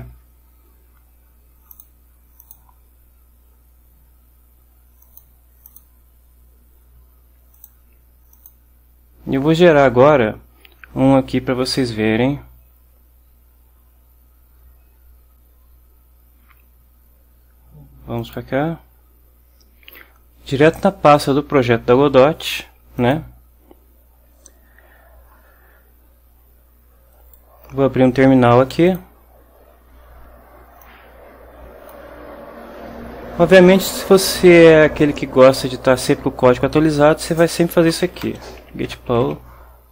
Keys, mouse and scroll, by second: 0.0 ctrl+alt+Right, 1.8 click, 2.5 click, 5.1 click, 5.8 click, 7.7 click, 8.5 click, 18.3 click, 23.1 click, 27.3 right click, 29.0 click, 30.9-32.2 drag, 37.6-39.7 typing.